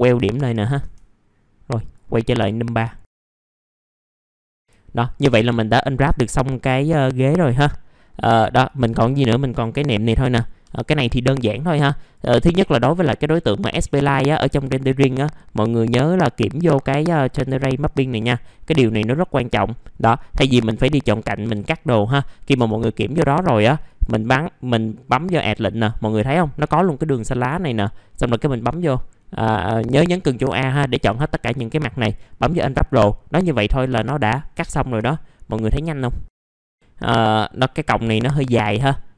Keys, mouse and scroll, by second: 0.9 click, 1.3 F3, 1.5 scroll down 1, 2.7 click, 3.4 middle click, 3.6 F4, 3.8 click, 3.9 F4, 4.2 scroll down 1, 4.5 middle click, 5.4 click, 5.8 alt+middle click, 6.4 middle click, 6.8 alt+middle click, 7.7-8.8 scroll up 1, 8.8-9.2 scroll down 1, 9.6 click, 10.1 alt+middle click, 10.8 alt+middle click, 11.6 F4, 12.3 middle click, 12.6-13.0 scroll up 1, 13.0 click, 13.7-14.2 scroll down 1, 15.4 click, 17.3-18.3 drag, 19.1-20.3 right drag, 20.4 click, 20.8 middle click, 23.3-23.7 scroll up 1, 23.7 F4, 24.0 middle click, 25.0 click, 27.1 middle click, 27.3-29.3 scroll down 1, 29.3 click, 32.0 F2, 33.2-34.2 drag, 34.2 click, 36.8 middle click, 37.0 scroll up 1, 38.5 click.